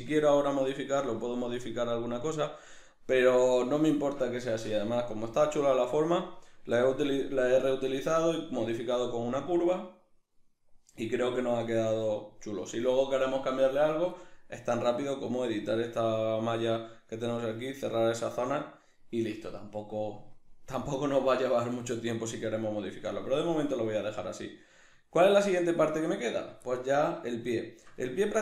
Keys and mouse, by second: 3.2 middle click, 7.4 middle click, 11.0 shift+middle click, 11.4 middle click, 18.4-26.4 middle drag, 26.4 right click, 26.7-28.4 middle drag.